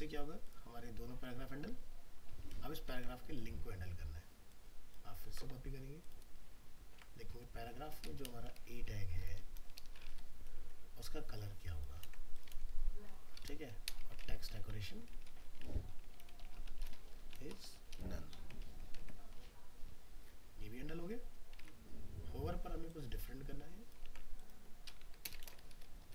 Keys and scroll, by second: 3.0 alt+Tab, 5.3 ctrl+c, 6.9 ctrl+v, 12.0 ctrl+c, 12.5 ctrl+v, 18.7 ctrl+s, 19.0 alt+Tab, 24.0 ctrl+c, 25.4 ctrl+v.